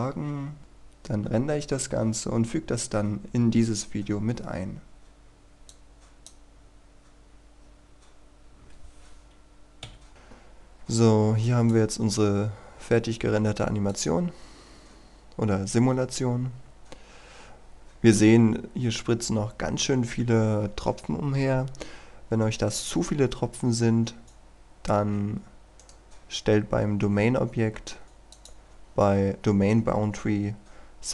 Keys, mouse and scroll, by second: 5.7 click, 7.8-9.5 scroll down 1, 9.9 Escape, 10.1 click, 25.7 right click, 28.0-31.1 drag.